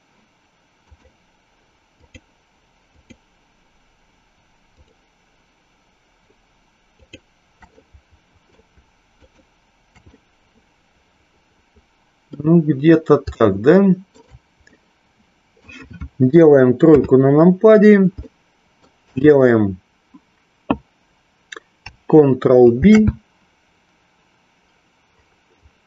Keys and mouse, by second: 0.8 shift+click, 7.0 shift+click, 7.7-8.7 middle drag, 9.2 shift+click, 10.2-12.2 middle drag, 13.3 shift+middle click, 14.8 middle click, 16.8 KP_3, 18.3 middle click, 22.7 ctrl+b.